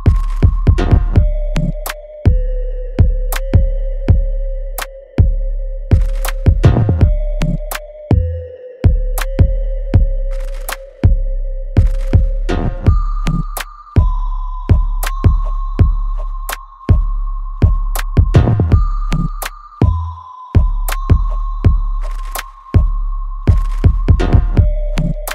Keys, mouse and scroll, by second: 0.1 alt+middle click, 0.7 alt+click, 1.3 alt+middle click, 1.8-4.1 alt+drag, 4.1-6.3 alt+drag, 7.2 e, 7.9 click, 11.9 click, 13.7 space, 15.3 alt+middle click, 16.6 w, 17.3-19.3 drag, 19.3 space, 20.3 click, 21.9 e, 23.1 click, 24.0 w, 24.8 click.